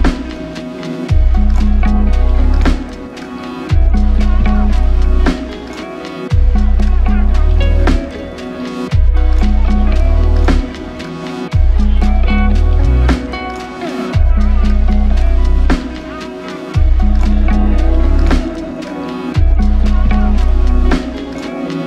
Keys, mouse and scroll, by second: 2.7 ctrl+shift+click, 4.3 ctrl+shift+click, 5.8 ctrl+shift+click, 13.4 ctrl+shift+click.